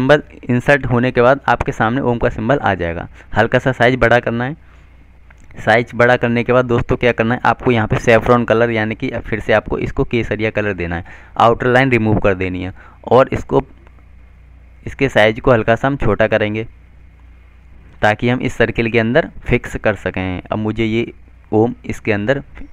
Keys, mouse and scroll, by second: 9.6 click, 11.1 right click, 13.1 click, 22.0 shift+click.